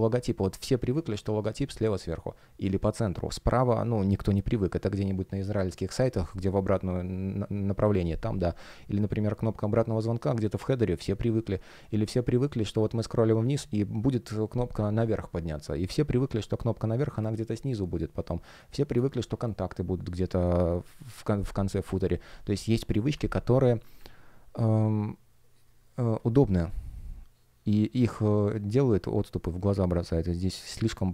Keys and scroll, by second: 0.8 space, 17.3 space, 25.8 space.